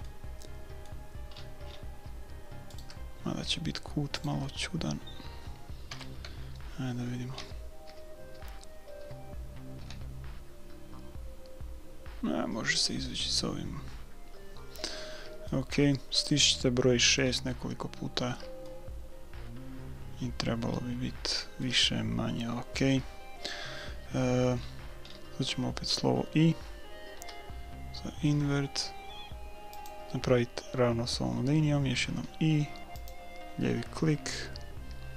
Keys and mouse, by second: 0.2-2.8 middle drag, 2.8-4.8 right drag, 4.8-6.8 middle drag, 5.9 KP_1, 7.4-9.8 typing, 15.5-17.3 middle drag, 17.6-20.4 middle drag, 24.6-27.6 middle drag, 27.2 i, 32.0 i.